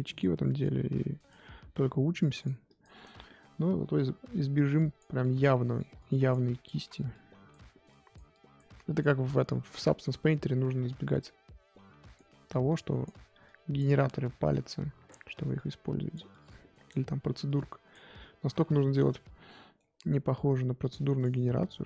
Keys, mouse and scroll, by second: 3.2-4.6 middle drag, 4.6 click, 5.5 middle click, 5.9 click, 6.7 ctrl+z, 7.1-9.6 drag, 9.6 scroll down 5, 9.8 middle click, 10.1-10.6 scroll up 2, 10.6 middle click, 10.8-11.2 scroll up 2, 11.2-14.0 drag, 14.0 middle click, 14.6-18.4 drag, 18.4 ctrl+z, 18.6 middle click, 19.2 scroll up 2, 19.4-20.8 middle drag, 20.8 click, 21.4 middle click.